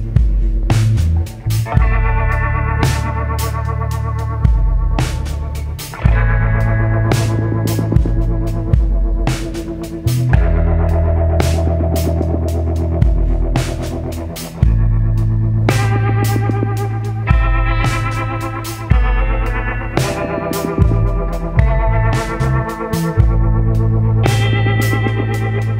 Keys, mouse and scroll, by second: 0.0-1.2 ctrl+drag, 3.0 ctrl+click, 4.7-9.8 ctrl+drag, 10.7-11.3 scroll up 4, 12.2 click, 13.5-17.2 ctrl+drag, 18.0 ctrl+scroll down 2, 18.8 ctrl+scroll down 2, 19.7 ctrl+click, 20.7-22.2 drag, 24.6 click.